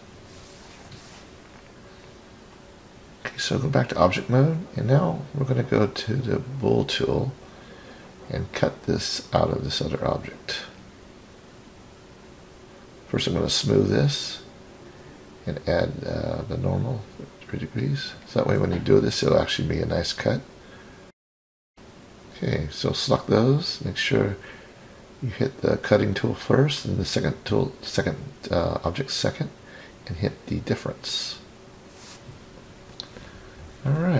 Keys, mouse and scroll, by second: 0.7-1.1 scroll down 1, 1.3 KP_1, 2.7 KP_3, 4.0-4.8 scroll down 3, 4.8-6.1 scroll up 6, 6.7-7.4 drag, 9.2 click, 11.0-11.8 middle drag, 14.2 right click, 17.2 click, 18.3 click, 19.5-20.4 scroll down 1, 20.4-22.0 middle drag, 20.4-20.7 scroll down 2, 22.5-23.4 scroll up 1, 23.4-25.6 scroll up 2, 26.4 shift+click, 28.8 click, 30.3-34.1 middle drag.